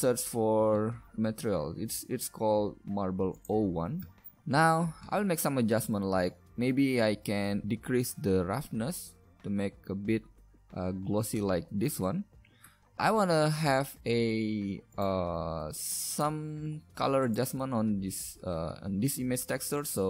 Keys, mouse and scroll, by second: 5.0 shift+a, 5.8-7.2 middle drag, 13.0 shift+a, 17.5-20.0 drag.